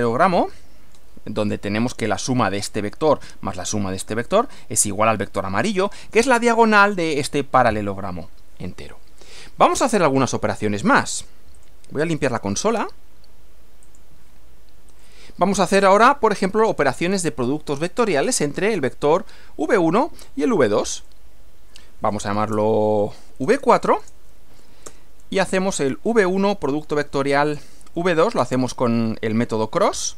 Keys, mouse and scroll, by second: 8.7 middle click, 9.9 middle click, 11.5 click, 12.1 right click, 13.9 click, 14.9 click, 15.9 Return, 21.0 click, 22.3-28.1 typing, 30.0-30.1 typing.